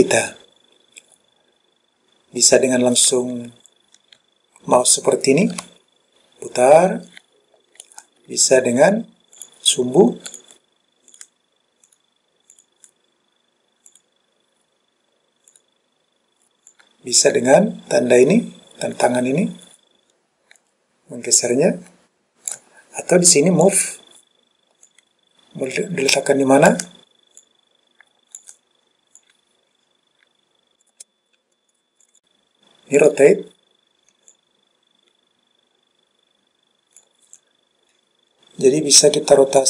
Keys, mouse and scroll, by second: 3.2-8.0 middle drag, 9.5 click, 10.4 click, 11.2 click, 12.0 click, 12.6 click, 14.0 click, 15.6 click, 16.8-22.6 drag, 23.8 click, 25.0 click, 27.5 click, 29.3 click, 32.0 click, 32.2 click, 33.1 click, 34.4 click.